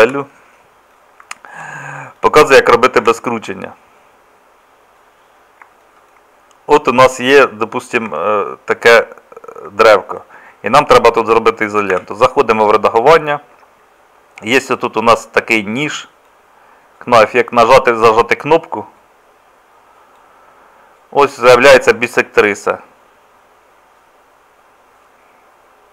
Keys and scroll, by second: 0.1 Delete, 3.0 Tab, 8.1 Tab, 12.0 Tab.